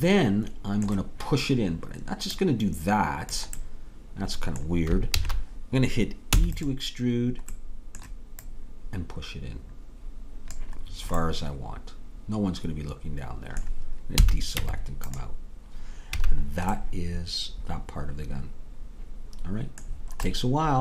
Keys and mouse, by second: 4.6 middle click, 5.2 ctrl+z, 6.3 e, 8.5-10.5 drag, 10.6-14.2 middle drag, 14.2 a, 14.6 Tab, 16.1 a.